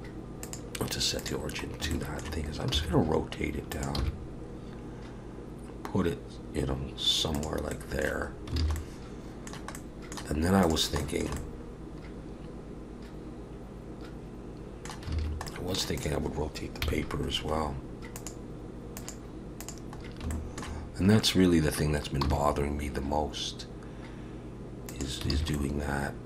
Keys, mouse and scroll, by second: 1.7 scroll up 2, 1.9 shift+middle click, 2.7 r, 4.0 g, 7.7 middle click, 8.3 scroll down 3, 8.6 alt+a, 8.8 middle click, 9.7 middle click, 10.6 click, 11.0 shift+middle click, 11.4 middle click, 15.3 alt+a, 15.5 middle click, 16.0 click, 16.8 KP_3, 18.2 click, 20.0 scroll up 3, 20.3 shift+middle click, 22.2 r, 25.4 alt+a, 25.6 middle click.